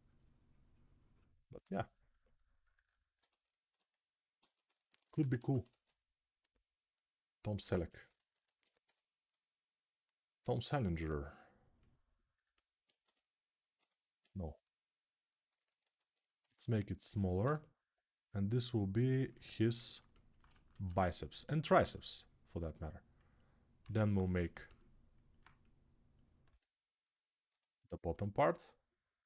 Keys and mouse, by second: 5.1 ctrl+Tab, 5.4 shift+a, 7.5 Tab, 8.6 g, 9.2 middle click, 10.1-13.5 right drag, 12.8 g, 13.5-21.9 alt+middle drag, 14.2 g, 16.2 s, 17.2 g, 20.5 shift+d, 21.9-24.3 right drag, 23.9 g, 24.3-25.4 alt+middle drag, 25.4-27.2 right drag, 26.3 g, 27.2-29.2 alt+middle drag.